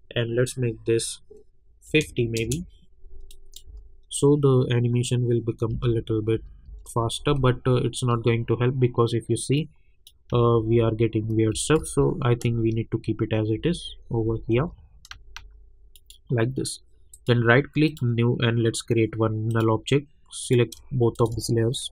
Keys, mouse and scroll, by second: 2.3 Return, 3.3 click, 3.6 space, 5.7 space, 9.5 click, 10.3 space, 11.8 ctrl+z, 12.4 space, 15.9 click, 17.1 right click, 17.9 click, 21.1 shift+click.